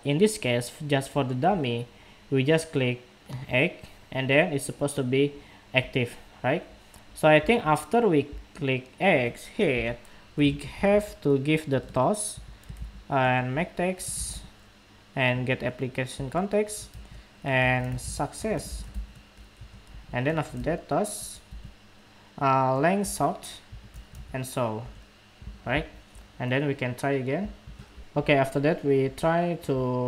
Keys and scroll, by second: 27.6 shift+super+2.